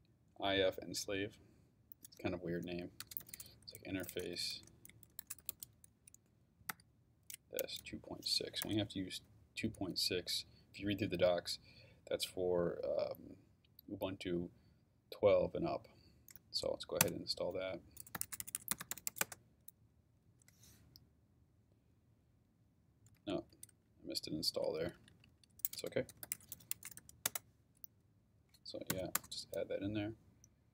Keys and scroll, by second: 3.0-8.6 typing, 17.0 Return, 17.9-19.6 typing, 23.2 Up, 23.5 Left, 24.8 Right, 25.7-27.3 typing, 28.9 y, 29.1 Return.